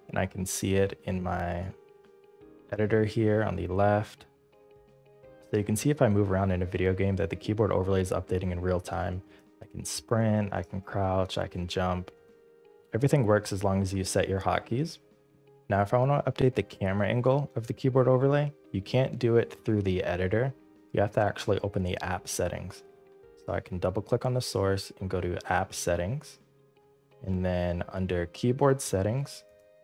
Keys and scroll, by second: 5.4-15.3 typing.